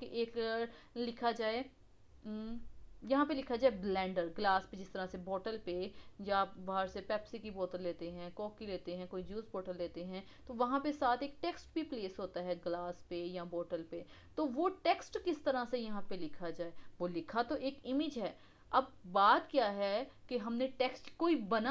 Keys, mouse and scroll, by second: 4.5-7.6 middle drag, 11.9-14.5 middle drag, 14.5-15.7 scroll up 2, 15.7-16.0 scroll down 2, 16.0-19.1 middle drag.